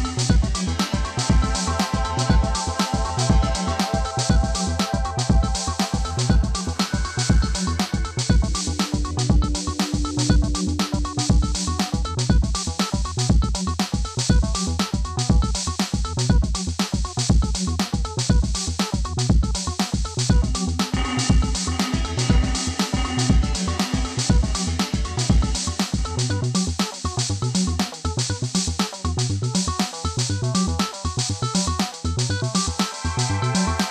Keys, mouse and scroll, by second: 0.1 right click, 0.1 typing, 0.7 click, 1.6 ctrl+click, 2.5 scroll down 1, 3.3 click, 4.3 ctrl+c, 4.6 click, 5.8 click, 7.5 typing, 7.9-10.0 drag, 10.3 ctrl+g, 11.0 click, 11.9-13.3 typing, 13.5 click, 14.0 ctrl+click, 14.7 scroll down 1, 15.0-17.3 drag, 17.7 click, 22.0 click, 23.5 scroll down 1, 25.3 click, 28.0 click, 28.4 scroll up 1, 29.8 click, 32.8 click, 33.2-33.9 scroll down 1.